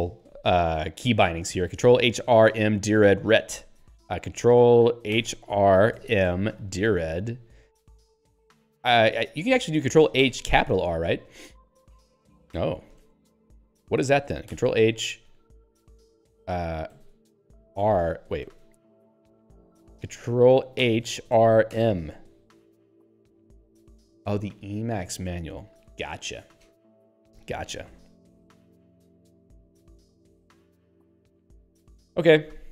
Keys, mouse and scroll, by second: 6.2-7.5 typing, 8.3 ctrl+g, 12.0 e, 13.0 ctrl+g, 17.8 r, 18.5 ctrl+g, 22.2 m, 23.9 q.